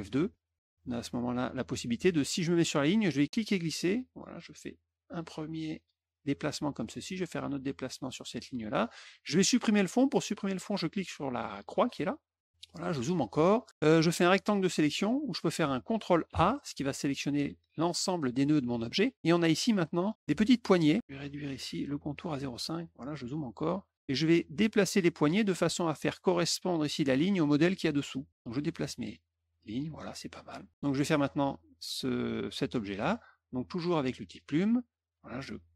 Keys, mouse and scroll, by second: 0.2 F2, 3.3-5.1 drag, 7.2-8.7 drag, 11.7 click, 12.8 middle click, 13.3 middle click, 14.1 click, 15.4 click, 16.2 ctrl+a, 20.2 click, 22.1 click, 22.6 middle click, 22.6-23.5 scroll up 3, 23.0 middle click, 23.3 middle click, 24.4-25.5 drag, 28.3-29.7 drag, 34.2 click.